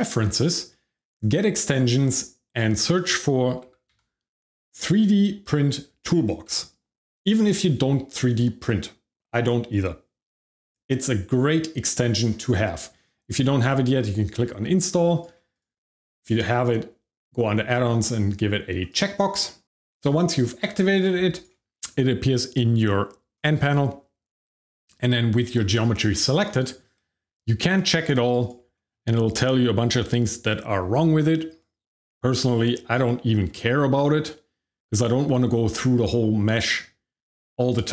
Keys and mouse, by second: 23.3 click, 26.4 shift+middle click, 28.4 click, 33.0 shift+middle click.